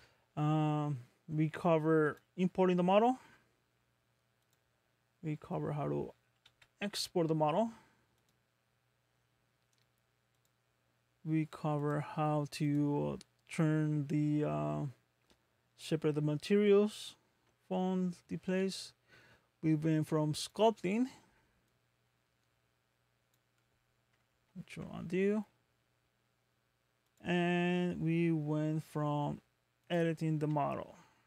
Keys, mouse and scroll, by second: 2.0 click, 6.5 a, 8.2 click, 11.7 click, 12.7 click, 24.5 ctrl+z, 27.1 ctrl+z, 27.1 click, 29.1 Tab, 29.8 click, 30.4 g.